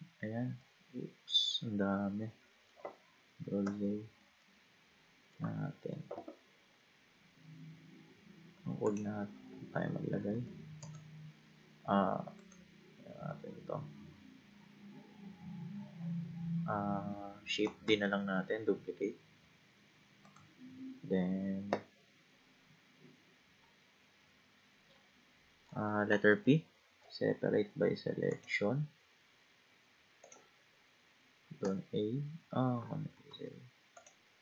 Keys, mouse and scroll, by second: 0.6-3.6 middle drag, 3.6 ctrl+z, 4.4-7.4 middle drag, 8.9-10.3 drag, 10.3 Tab, 12.2 Tab, 12.4-15.5 right drag, 17.9 shift+d, 20.9 middle click, 26.3 p, 30.2 click, 31.6 a, 33.3 ctrl+z, 34.0 click.